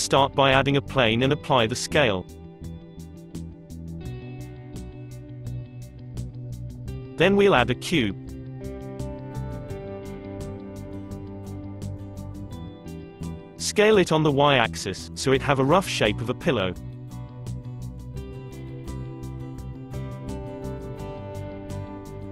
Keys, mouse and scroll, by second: 1.0 ctrl+a, 3.4-5.9 middle drag, 5.9 shift+a, 8.2 shift+a, 9.5 drag, 11.4-14.6 middle drag, 15.5 s, 18.6 middle click, 19.6 s, 20.6-22.3 middle drag.